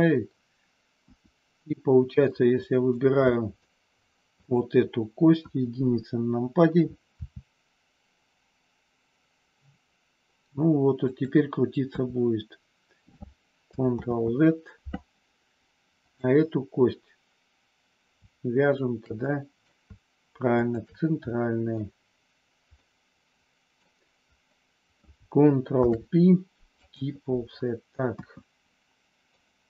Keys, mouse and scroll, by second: 1.0 KP_1, 2.4 middle click, 3.4 middle click, 4.4 click, 5.4 KP_1, 7.1 r, 11.0 click, 11.9 KP_3, 14.0 ctrl+z, 16.0 click, 19.3 middle click, 20.5 shift+click, 21.4 middle click, 22.7-23.9 middle drag, 25.6 ctrl+p, 28.1 KP_1, 29.4 middle click.